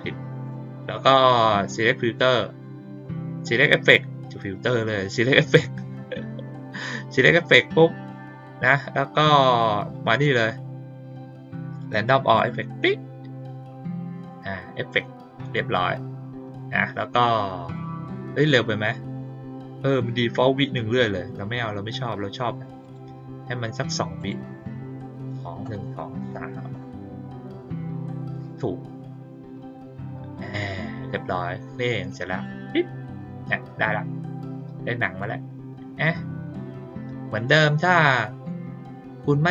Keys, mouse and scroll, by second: 0.4 click, 1.6 click, 10.1 click, 12.2 click, 22.8 click, 24.1 click, 28.3 click, 32.3 click, 34.4 click.